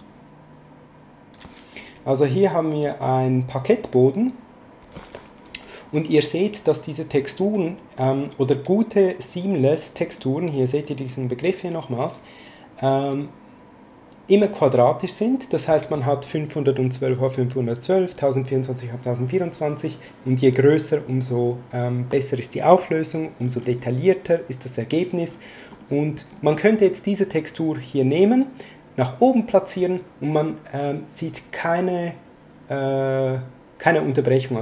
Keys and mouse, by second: 0.0 click, 10.2 click.